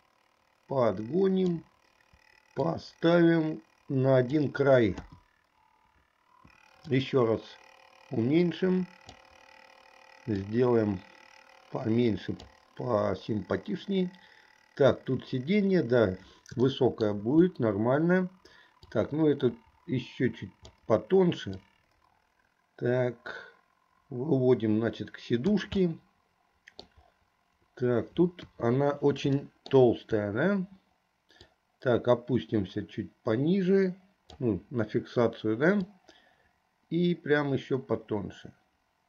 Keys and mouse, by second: 2.7-4.5 drag, 5.0 KP_3, 7.0-9.4 drag, 10.6-12.5 drag, 16.8 shift+middle click, 19.0-20.9 drag, 21.8-25.7 drag, 25.9-27.1 middle drag, 28.5 KP_1, 29.5 shift+middle click, 31.5 click, 31.8-34.7 drag, 35.8-39.0 drag.